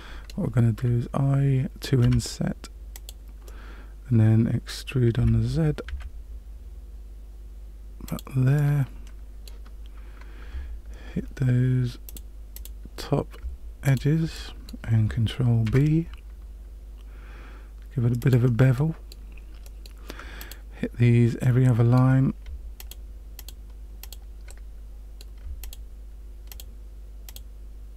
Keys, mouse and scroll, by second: 2.0 i, 3.4 middle click, 5.1 e, 8.5 middle click, 12.0 click, 12.5 click, 13.8 alt+click, 14.3 middle click, 15.6 ctrl+b, 18.7 middle click, 19.6 middle click, 20.3 click, 21.4 middle click, 22.7 shift+click, 23.3 shift+click, 24.0 shift+click, 24.4 middle click, 25.6 shift+click, 26.5 shift+click, 27.2 shift+click.